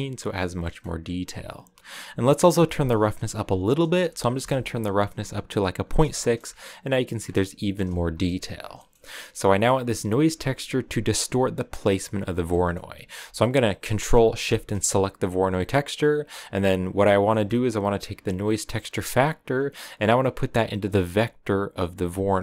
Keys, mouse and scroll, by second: 4.3-5.8 drag, 5.8 scroll up 2, 6.1 shift+middle click, 6.4-6.7 scroll up 1, 7.2-7.8 scroll down 5, 7.5 shift+middle click, 10.0-11.7 drag, 12.5-14.0 middle drag, 14.0 ctrl+shift+click, 14.4 ctrl+shift+click, 16.2 click, 17.9-22.0 drag.